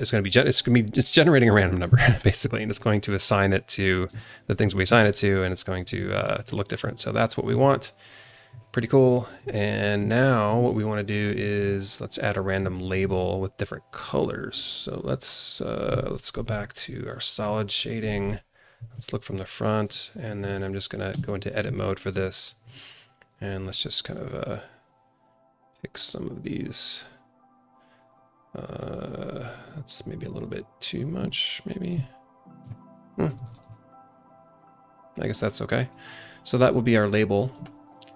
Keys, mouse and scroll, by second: 3.8 scroll down 1, 4.2 alt+shift+middle click, 6.4 middle click, 7.6 middle click, 7.7-8.1 alt+drag, 8.3 scroll up 2, 8.6-9.2 alt+middle drag, 8.9 alt+click, 9.8 scroll down 1, 10.1 alt+shift+middle click, 11.7-12.3 scroll down 1, 12.3 scroll up 1, 12.7-13.0 alt+shift+middle drag, 13.0 scroll down 1, 14.1 click, 14.7-15.7 scroll up 1, 16.4 z, 17.2 scroll down 1, 17.5 alt+middle click, 17.9-18.7 scroll up 1, 18.7 KP_1, 19.6 scroll up 2, 20.0 alt+shift+middle drag, 20.5 click, 21.1 Tab, 21.4 scroll up 1, 21.9 alt+shift+middle click, 22.5-23.6 scroll down 1, 23.6-24.8 drag, 26.8-28.8 drag, 31.2 Tab, 32.0 ctrl+z, 32.6 alt+middle click, 33.4 scroll down 2, 33.7-35.9 alt+middle drag, 36.5 scroll up 1, 36.8 alt+middle click, 37.6 alt+shift+middle click.